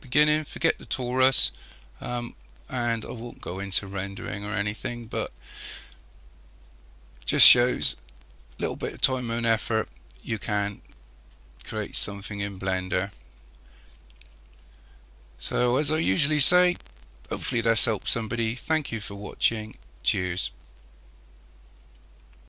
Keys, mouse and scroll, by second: 21.8 click.